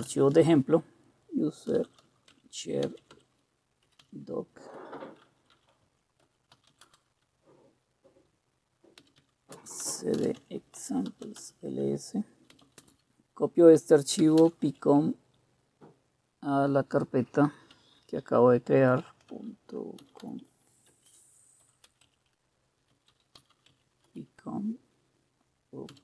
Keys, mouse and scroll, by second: 0.0-7.0 typing, 8.8-14.9 typing, 17.7-24.6 typing, 25.6-26.0 typing.